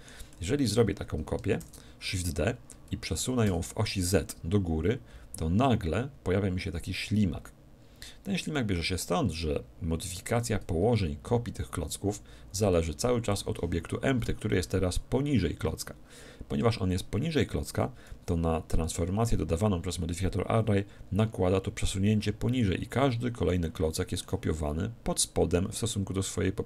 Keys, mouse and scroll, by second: 1.6 shift+d, 13.4-15.3 drag, 23.5-25.2 middle drag.